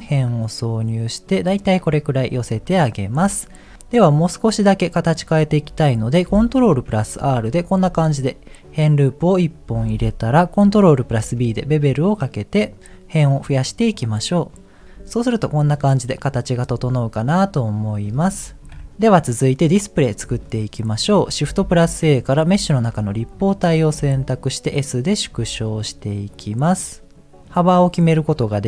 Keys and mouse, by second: 2.7 middle click, 5.4 middle click, 6.9 ctrl+r, 8.1-9.8 middle drag, 11.1 ctrl+b, 15.9 middle click, 17.5 click, 18.7 KP_1, 20.6 middle click, 21.8 shift+a, 23.9 s, 25.3 s.